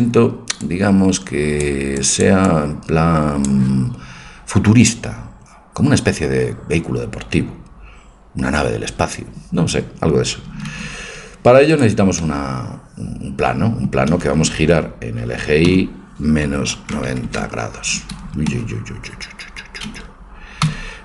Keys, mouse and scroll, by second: 0.7-3.0 drag, 3.2-4.2 drag, 10.7 shift+a, 12.2 middle click, 15.6 y, 16.4 KP_Subtract, 16.8 KP_9, 17.0 KP_0, 17.3 KP_Enter, 18.2 Escape, 18.5 Escape, 20.7 y.